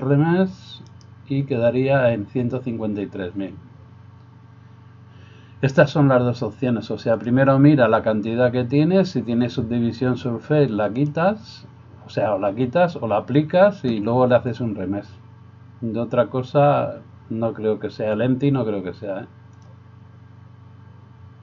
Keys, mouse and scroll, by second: 10.9-18.5 drag, 19.8-21.4 drag.